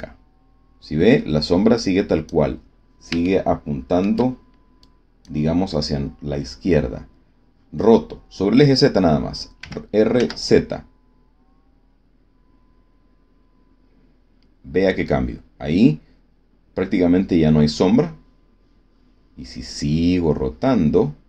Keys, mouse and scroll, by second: 3.2 shift+click, 4.7 click, 9.5 r, 10.1 z.